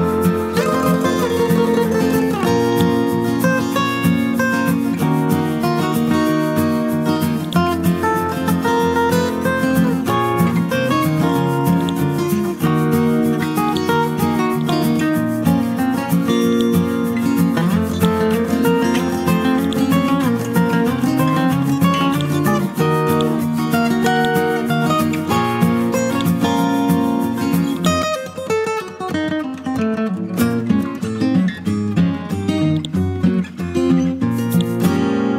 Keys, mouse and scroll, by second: 2.1-2.7 scroll down 1, 2.7 click, 3.2-4.5 scroll up 1, 4.9-7.5 scroll down 1, 7.5-8.6 drag, 8.6-9.3 scroll up 1, 9.5 Home, 10.7-11.8 scroll up 1, 11.8-13.6 drag, 19.2-19.6 scroll down 1, 19.6 click, 20.8 click, 24.7-26.1 scroll up 1, 26.1-30.9 drag, 33.2-34.5 scroll down 1, 34.5 click.